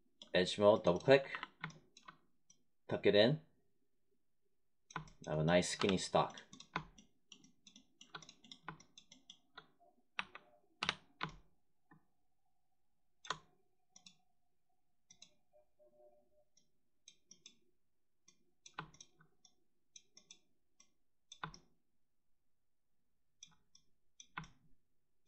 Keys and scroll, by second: 1.2 r, 5.7 3, 10.1 1, 10.7 3.